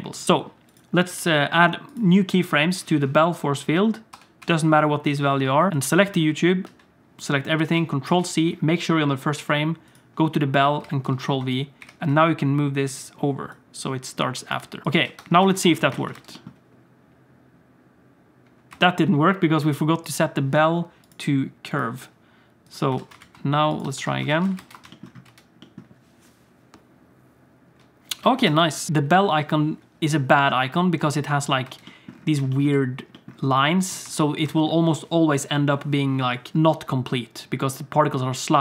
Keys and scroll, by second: 4.1 i, 4.4 i, 6.6 a, 8.0 ctrl+c, 11.0 ctrl+v, 11.8 g, 15.0 Tab, 15.1 Tab, 15.4 alt+a, 15.6 ctrl+s, 16.1 space, 18.7 space, 22.9 alt+a, 23.2 ctrl+s, 23.8 Tab, 23.9 Tab, 24.3 alt+shift+z, 24.5 ctrl+space, 25.2 space, 28.2 alt+shift+z, 28.4 space, 31.7 space, 34.0 space, 34.4 space.